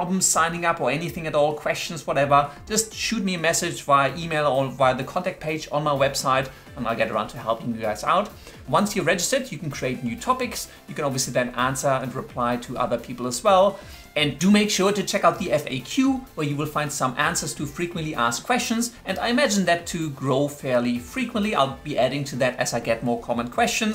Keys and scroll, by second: 9.8-14.2 typing, 12.8 Return.